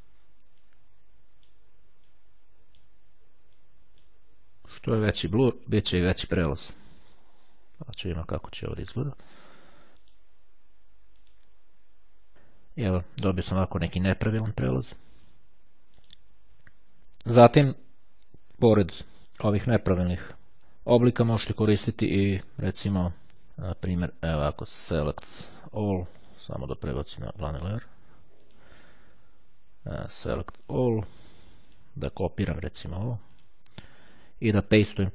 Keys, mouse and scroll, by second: 0.6-3.2 drag, 3.4-4.6 drag, 4.8-5.9 drag, 6.5 click, 10.0 right click, 11.3 click, 15.6 right click, 18.6 click, 25.0 click, 27.0 click, 28.6 click, 30.3-31.4 drag, 31.8 click, 33.4 click, 34.1 click.